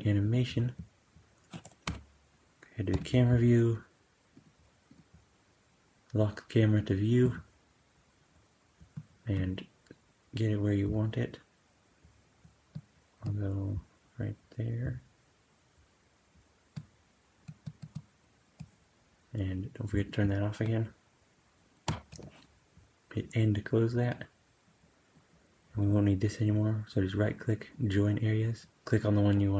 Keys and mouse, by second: 0.1 click, 1.7 KP_0, 2.8 n, 4.3 click, 19.9 click, 21.8 n, 24.2-25.7 drag, 25.7-26.9 right drag.